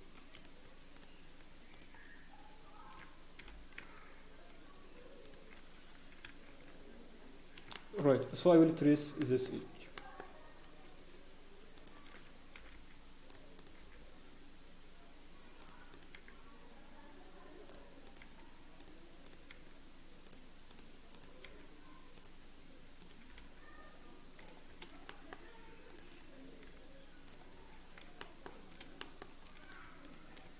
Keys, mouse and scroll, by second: 0.3 click, 0.9 shift+click, 1.7 click, 3.4 g, 5.8 scroll down 1, 6.2 ctrl+z, 6.8-7.1 scroll down 4, 7.1-7.6 scroll up 1, 7.7 shift+middle click, 8.0 scroll up 4, 9.2 shift+middle click, 10.2 shift+middle click, 10.2-10.7 shift+scroll, 11.7 click, 11.7-12.5 shift+scroll up 1, 13.3 g, 13.5 click, 13.7 g, 15.9 click, 16.1 g, 18.0 click, 18.2 g, 19.2 click, 19.5 g, 20.7 click, 21.4 g, 23.0 click, 23.2 g, 24.7 scroll down 1, 25.0 shift+middle click, 25.4 scroll down 1, 25.9 click, 25.9 scroll down 1, 26.6 scroll up 1, 26.6 g, 27.5 scroll down 1, 28.2 shift+middle click, 28.5 scroll down 3, 29.0 shift+middle click, 29.6 click, 29.6 scroll up 2, 30.0 shift+click.